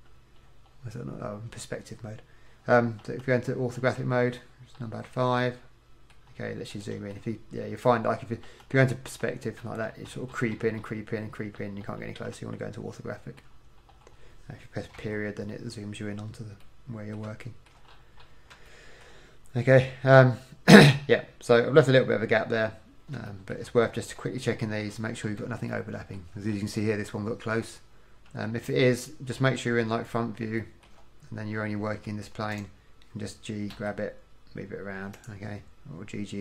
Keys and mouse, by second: 3.1 KP_8, 3.9 KP_5, 8.6 KP_8, 9.2 KP_5, 12.4 KP_5, 15.1 KP_Decimal, 23.6 middle click, 23.7 middle click, 28.4 KP_1, 33.6 click, 33.8 g, 35.2-36.4 drag.